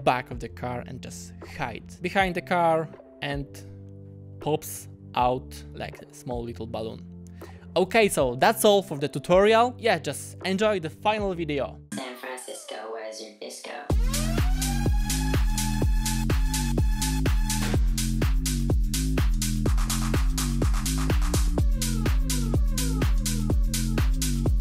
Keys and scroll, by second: 0.8 space, 5.7 space.